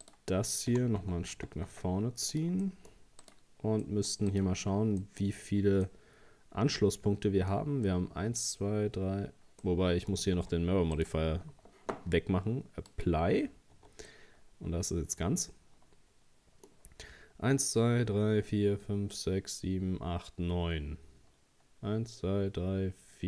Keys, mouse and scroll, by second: 0.0 right click, 0.7 g, 2.6 middle click, 3.2 right click, 3.8 middle click, 4.3 right click, 4.6 Tab, 5.0 middle click, 5.5-5.9 scroll up 1, 5.9-8.9 middle drag, 9.6 scroll up 1, 9.6 middle click, 10.4 Tab, 11.0 right click, 12.9 click, 13.7 Tab, 14.1-17.1 middle drag.